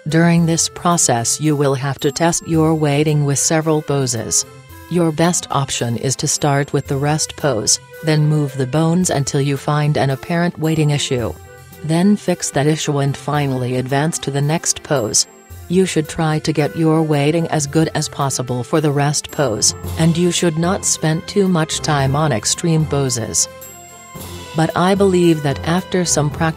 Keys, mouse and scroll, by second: 0.2-2.0 drag, 5.0-8.4 middle drag, 10.0-12.0 right drag, 12.3-19.6 drag, 18.4 middle click, 18.6 middle click, 19.1 middle click, 19.6-20.9 middle drag, 21.1-22.6 drag, 22.9-26.5 drag.